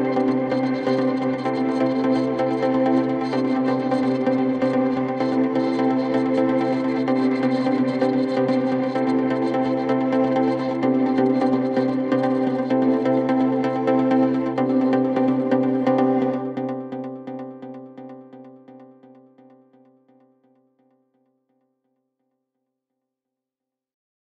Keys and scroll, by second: 1.5 Delete, 3.8 ctrl+F1, 14.8 Escape, 18.7 ].